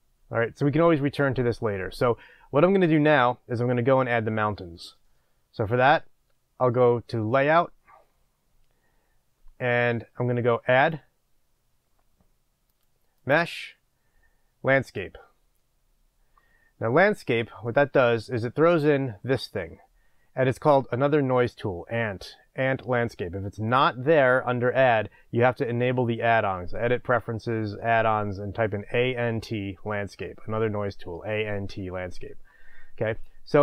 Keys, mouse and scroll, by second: 15.1 click, 17.0-21.5 middle drag, 17.7-18.8 scroll up 2, 18.8-19.7 scroll up 1, 19.7-20.8 scroll up 1, 20.8-21.5 scroll up 1, 31.7 scroll.